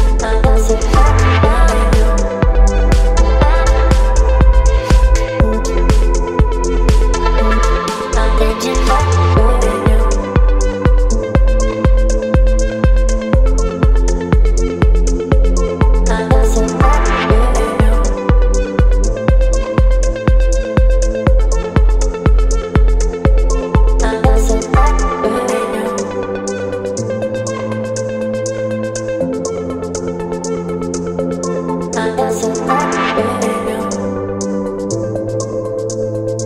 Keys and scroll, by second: 5.7 Return, 8.3 b, 21.7 x, 24.9 space, 30.1 space, 35.9 v.